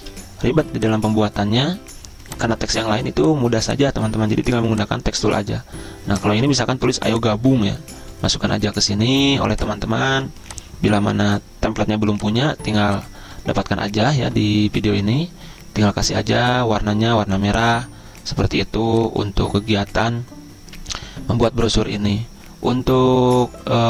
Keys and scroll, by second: 0.3 z, 1.3 z.